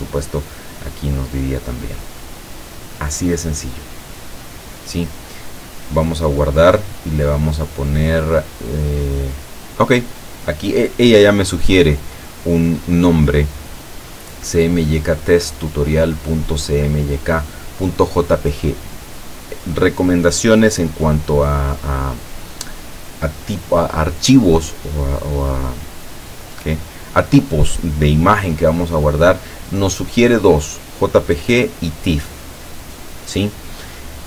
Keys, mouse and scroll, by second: 6.5 click, 20.9-22.0 drag, 26.4-27.4 drag, 30.9 click.